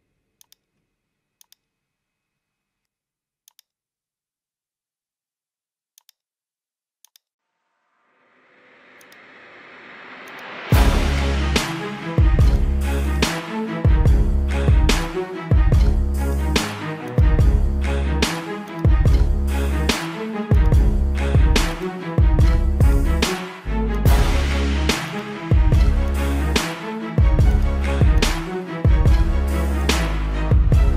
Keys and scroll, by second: 0.8 space, 1.6 space, 1.9 ], 6.0 space, 7.3 ctrl+-, 7.7 ctrl+-, 10.3 space, 10.9 ], 13.5 space, 16.4 space, 21.8 space, 25.6 space, 30.2 space.